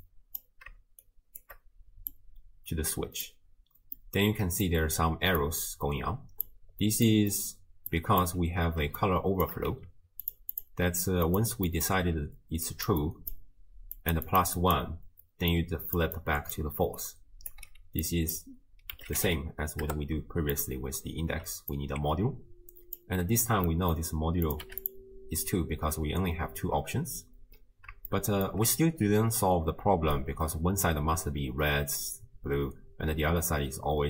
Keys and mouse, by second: 0.0 click, 1.3 shift+click, 2.1-3.3 drag, 4.0 middle click, 4.6 click, 5.4-6.4 drag, 7.1 middle click, 7.9 drag, 9.0-9.5 shift+drag, 9.7 g, 10.5 click, 11.3 click, 11.7 middle click, 12.2-18.0 typing, 12.7 click, 13.0 click, 14.3 click, 14.6 click, 15.5 click, 16.2 click, 17.2 click, 18.0-20.7 drag, 21.7-23.0 alt+drag, 23.7 middle click, 24.5 click, 28.2 shift+click, 29.8 d, 30.2 click, 30.9 d, 31.2 d.